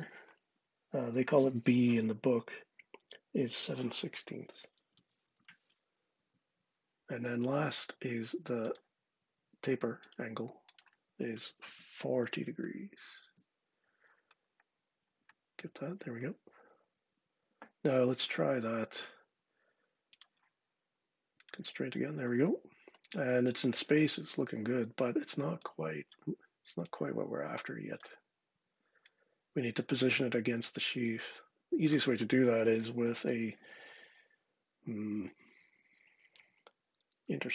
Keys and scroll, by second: 4.4-5.7 typing, 6.1 Return, 10.9-11.8 typing, 13.1 Return, 17.9 Escape, 26.0 Escape, 32.6-33.6 typing, 35.7 BackSpace, 37.1-37.5 typing.